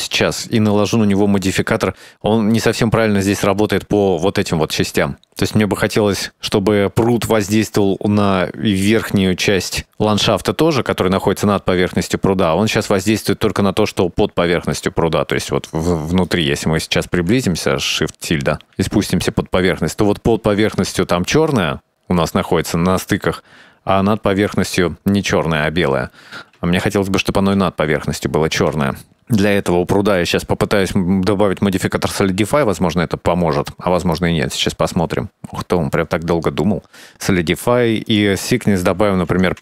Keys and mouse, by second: 1.6 click, 15.5 middle click, 16.6 shift+middle click, 30.1-35.1 drag, 37.7-38.8 drag, 39.3-39.6 middle drag.